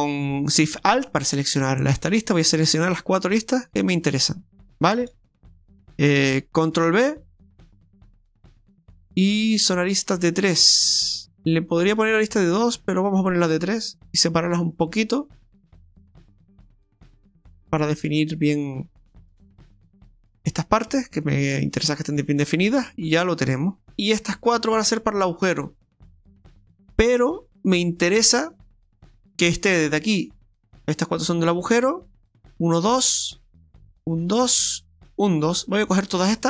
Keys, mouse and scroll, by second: 0.9 right click, 1.1 alt+shift+right click, 1.3 alt+shift+right click, 1.5 alt+shift+right click, 3.8 alt+shift+right click, 4.6 alt+shift+right click, 5.3 middle click, 6.9 ctrl+b, 19.1-19.8 scroll down 1, 19.8 Tab, 20.2 middle click, 21.2-21.5 scroll down 4, 21.6 middle click, 23.9 click, 24.0 right click, 24.3 shift+right click, 24.6 shift+right click, 25.4 right click, 29.9 right click, 32.7 shift+right click, 33.8 shift+right click, 34.3 shift+right click, 35.1 shift+right click, 35.5 shift+right click, 36.2-36.4 ctrl+shift+right click.